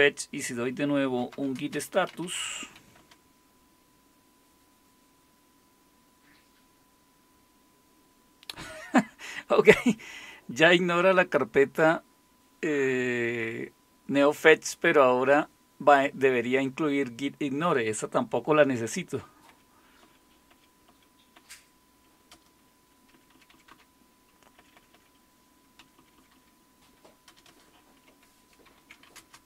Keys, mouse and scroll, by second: 0.9-3.2 typing, 19.1 Up, 19.5 Up, 20.0 Up, 20.5 Up, 20.9-21.3 Up, 22.3 Return, 23.1 Down, 23.3 Down, 23.5 Down, 23.7 Down, 24.4 Up, 24.9 Up, 26.3 Down, 27.3 Return, 28.6-29.4 typing.